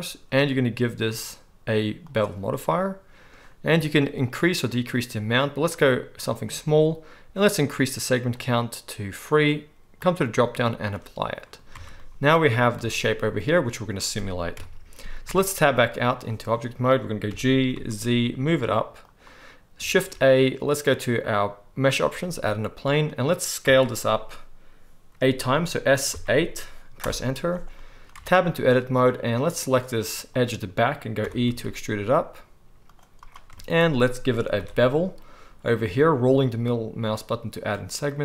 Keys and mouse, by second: 0.5-14.5 middle drag, 11.7 Tab, 12.7 a, 14.5 KP_1, 14.6 middle click, 15.3 Tab, 17.3 g, 18.2 middle click, 19.1-19.4 right drag, 19.4 click, 19.9 shift+a, 20.4-26.1 right drag, 23.6 s, 26.1-27.7 drag, 27.7-29.7 right drag, 28.1 Tab, 29.7 middle click, 30.1 click, 30.1-33.2 right drag, 31.2 e, 33.2 click, 33.2 shift+middle click, 33.7 shift+right click, 33.9 right click, 34.2-37.5 ctrl+middle drag, 34.5 ctrl+b, 37.5-38.2 right drag.